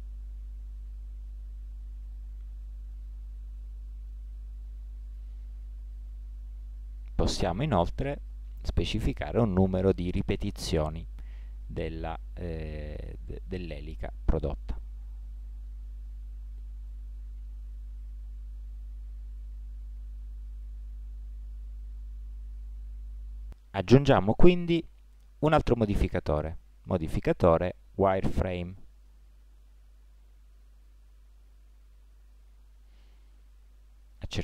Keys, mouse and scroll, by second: 1.4-3.0 middle drag, 3.0-4.2 drag, 5.6-8.2 middle drag, 8.2-11.7 drag, 15.1-17.6 middle drag, 26.9-28.7 drag.